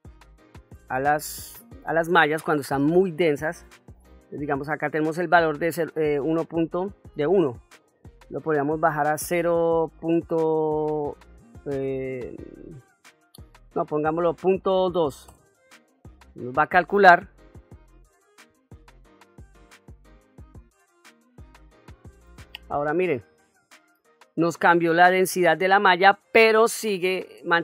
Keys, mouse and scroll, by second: 1.0 middle click, 2.1-2.7 middle drag, 5.8-21.6 drag, 23.5-24.1 middle drag, 24.3-25.7 ctrl+middle drag.